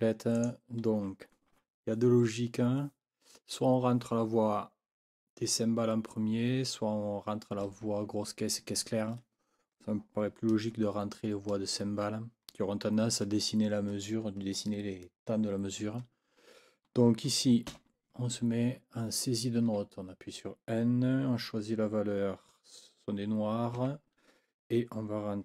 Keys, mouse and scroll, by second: 0.4 click, 17.7 n, 23.8 KP_5.